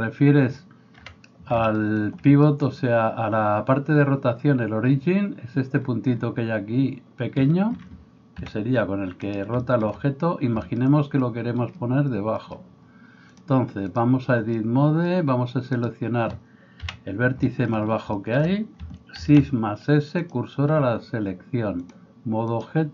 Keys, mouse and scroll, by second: 0.0-13.3 middle drag, 0.9 KP_1, 8.5 r, 13.3-22.9 drag, 15.8-16.8 middle drag, 15.8-16.8 right drag, 16.8 KP_1, 19.2 shift+s.